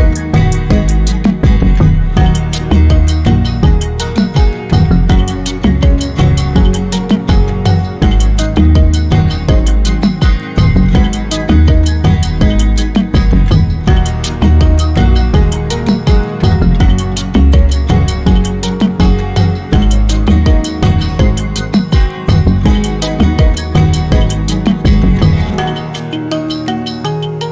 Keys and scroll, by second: 6.6 Left, 6.7 Left, 6.9 Left, 7.0 Left, 7.1 Left, 7.6-9.7 typing.